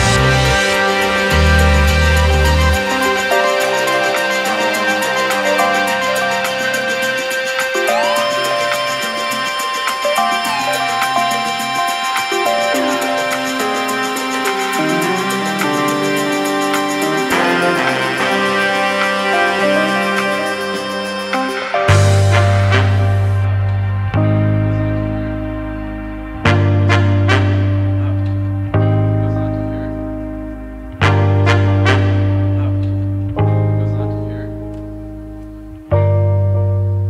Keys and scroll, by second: 19.8-22.2 typing, 21.4 Return.